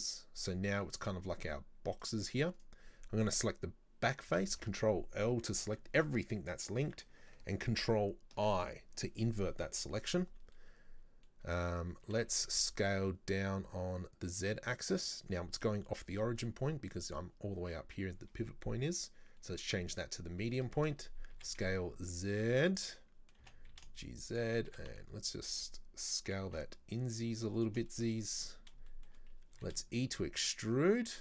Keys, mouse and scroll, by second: 2.0 right click, 2.6 right click, 4.3 ctrl+l, 8.4 ctrl+i, 15.3-17.0 scroll down 2, 17.0-20.0 drag, 20.5 middle click, 21.0-21.4 scroll up 3, 21.4 s, 27.9-29.6 shift+middle drag, 29.6 e.